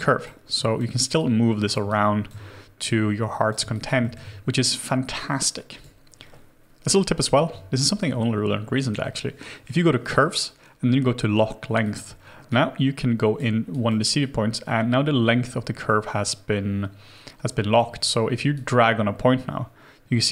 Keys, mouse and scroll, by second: 1.9 alt+click, 3.7 alt+click, 4.0 alt+middle click, 12.5 right click, 14.2 double click, 17.9-20.3 scroll down 1.